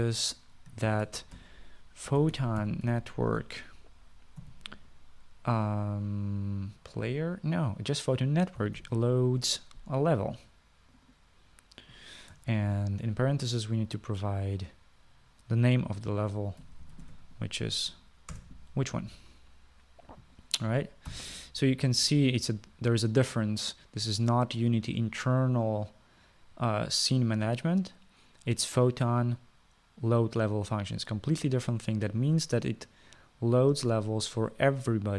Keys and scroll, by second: 0.0 Tab, 1.9-4.6 typing, 5.7 ., 9.6-10.4 typing, 14.0 shift+9, 17.8-18.9 typing, 19.6 Return, 22.4 ;.